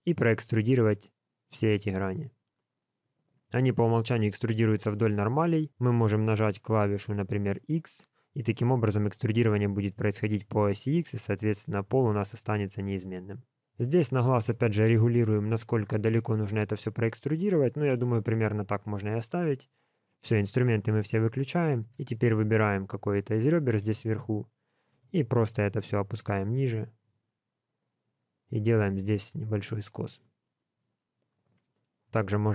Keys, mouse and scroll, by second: 1.0 click, 20.0 click, 20.6 middle click, 21.8 2, 22.2 click, 23.8 KP_1, 24.9 g, 31.5 middle click, 32.4 shift+click.